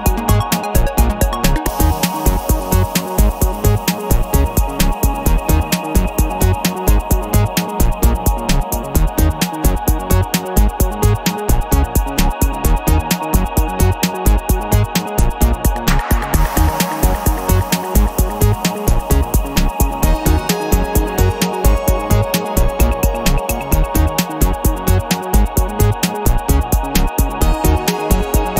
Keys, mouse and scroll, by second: 2.6 click, 3.0 click, 3.8 click, 6.1-8.4 drag, 8.6 scroll down 1, 9.5-12.8 drag, 13.3-14.5 drag, 15.1-16.6 drag, 17.6 click, 18.8 click, 20.2 click, 22.1-24.4 drag, 25.1 click, 25.8-28.0 drag, 28.1 scroll down 1.